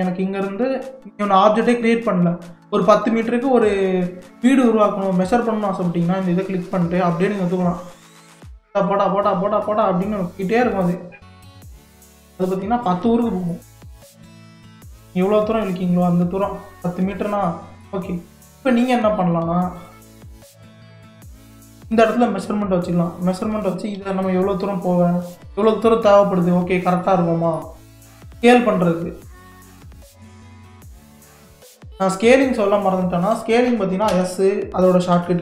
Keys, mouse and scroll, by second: 6.4 click, 11.4-11.8 scroll up 2, 11.8 scroll down 4, 12.4-15.3 middle drag, 15.3 click, 17.5-18.0 middle drag, 18.0 scroll down 4, 18.4-19.8 middle drag, 19.8 click, 20.3 g, 24.0 r, 27.0-28.4 middle drag, 28.4 s, 34.1 s.